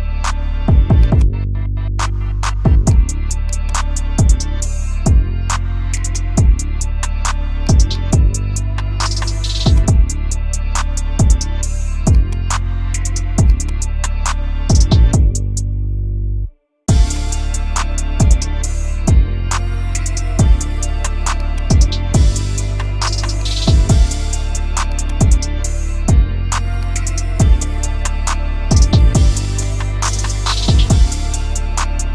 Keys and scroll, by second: 8.6 space, 8.9 Escape, 11.3 Escape, 11.5 F2, 14.6 F2, 19.6 space, 19.9 F4, 21.6 t, 22.0 Escape, 26.6 ctrl+r.